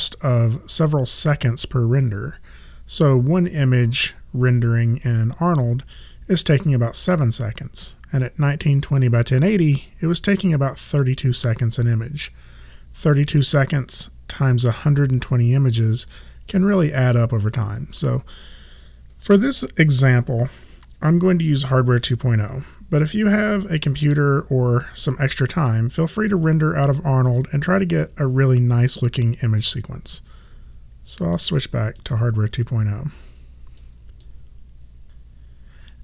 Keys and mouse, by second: 31.2 click.